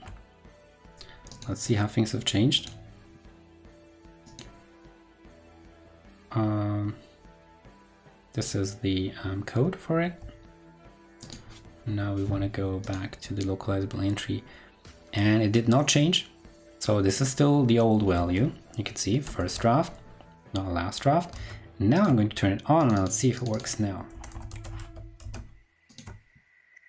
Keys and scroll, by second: 0.1 ctrl+Left, 10.5 super+f, 19.2 ctrl+super+Left, 21.3 super+Tab, 24.7 super+s, 25.2 super+Tab.